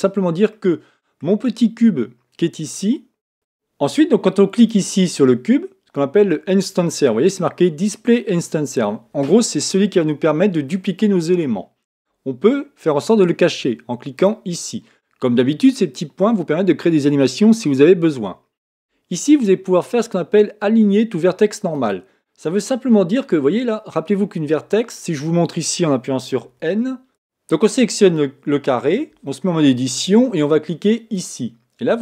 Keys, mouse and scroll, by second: 0.5-3.3 middle drag, 4.6 click, 14.1 click, 21.7 click, 22.6-24.8 middle drag, 24.7 scroll up 1, 26.4 scroll up 2, 26.5 n, 27.1 Tab, 29.1 Tab, 31.1-32.0 drag.